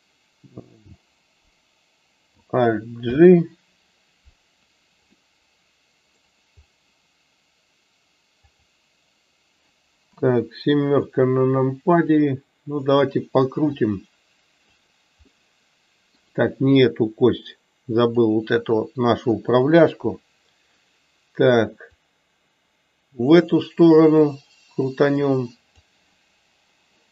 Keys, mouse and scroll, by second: 11.8 click, 13.7 click, 14.0 click, 17.8 click, 22.1-25.7 drag.